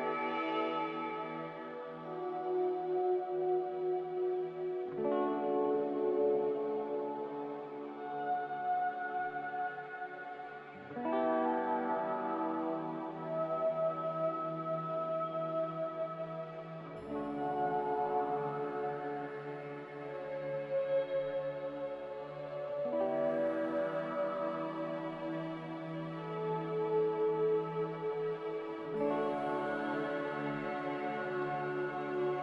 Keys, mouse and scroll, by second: 6.1 z, 16.0 Escape, 16.5 ctrl+z, 16.8 ctrl+z, 31.8 typing, 32.1 Return.